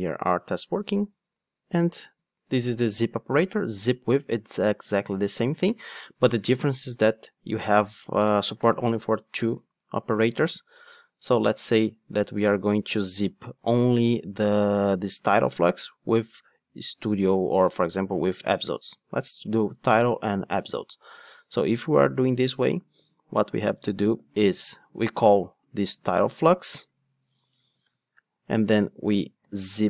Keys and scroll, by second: 3.9 super+c, 5.6 super+v, 25.9 super+c.